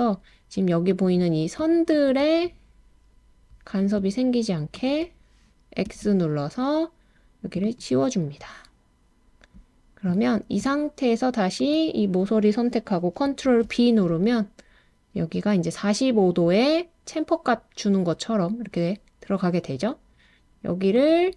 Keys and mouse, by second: 1.9 shift+click, 5.9 x, 13.4 super+b, 20.9 click.